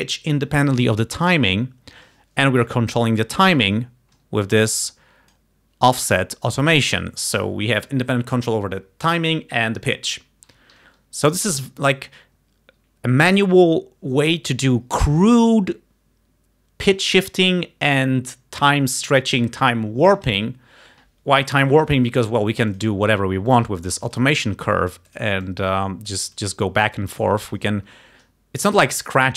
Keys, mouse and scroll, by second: 4.9 click, 10.8 Home, 22.8 click, 23.6 click, 24.5 click, 25.5-26.6 drag, 27.0 click.